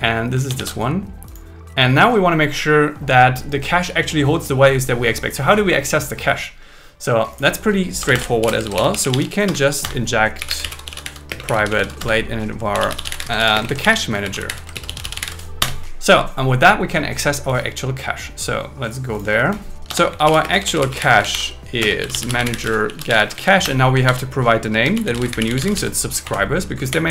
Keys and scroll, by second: 0.4 super+1, 8.0 Return, 8.4 alt+l, 8.7 shift+a, 9.5 Return, 11.3 space, 12.0 Return, 13.7 shift+c, 13.9 shift+c, 14.7 shift+m, 15.6 Return, 19.9 Return, 20.4 space, 21.1 space, 21.3 shift+0, 21.8 space, 23.5 shift+c, 23.6 Return, 24.1 shift+2, 26.3 Right, 26.8 Down.